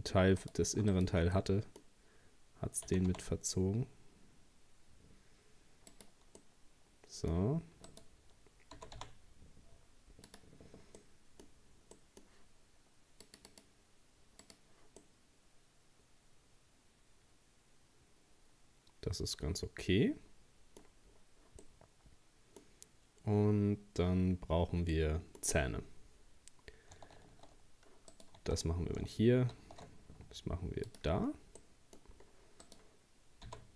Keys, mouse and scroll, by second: 0.4 right click, 0.9 alt+shift+right click, 1.4-2.9 middle drag, 2.9 g, 6.4-7.9 middle drag, 7.9 right click, 8.8 g, 11.0-13.3 middle drag, 13.3-15.0 drag, 15.0-18.2 middle drag, 21.1 scroll down 2, 21.6-23.7 middle drag, 23.7-24.7 scroll up 2, 24.7 scroll up 1, 24.9-27.2 middle drag, 27.2 shift+a, 28.4 Tab, 29.5 shift+a, 31.2-31.6 scroll down 1, 31.6 middle click, 32.2-32.6 scroll down 1, 32.6 right click, 33.5 g.